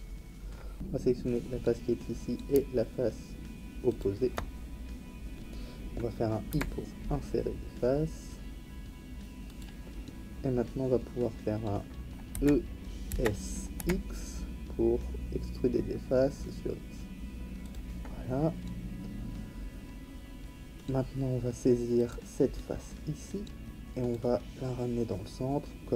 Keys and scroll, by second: 0.7 ctrl+z, 6.5 i, 12.3 e, 13.1 s, 13.8 x.